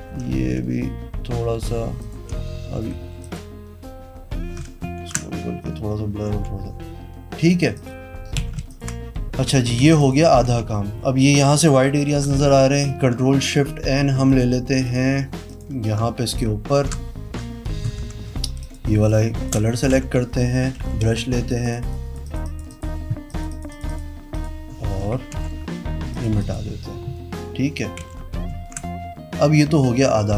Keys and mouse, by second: 0.1 ], 1.9 click, 2.4 ], 2.9 ], 3.1 [, 3.2 click, 3.7 ], 4.9 ctrl+z, 6.1 v, 7.4 click, 7.7 click, 8.4 z, 8.6 alt+click, 9.4 v, 9.7 z, 9.9 click, 10.4 v, 14.2 click, 16.7 ctrl+shift+n, 17.2 KP_Enter, 17.9 i, 18.6 click, 18.8 space, 19.0 click, 19.9 b, 20.7 ], 21.0 click, 21.0 ], 21.4 click, 21.7 click, 21.8 click, 22.2 click, 22.4 click, 22.6 click, 23.2 click, 23.4 click, 23.6 click, 23.8 click, 24.3 click, 25.3 v, 26.0 click, 26.3 click, 27.9 v.